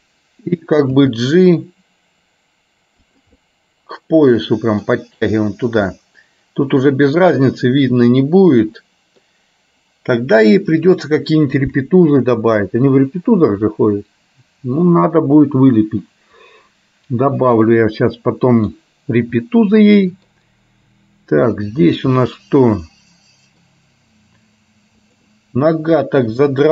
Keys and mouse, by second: 1.2 g, 3.5-5.0 middle drag, 6.0 middle click, 8.3-9.3 middle drag, 13.9-15.8 middle drag, 17.8-18.8 middle drag, 19.4-20.4 middle drag, 21.0 middle click, 22.3-23.7 middle drag, 25.2 click, 26.5 r.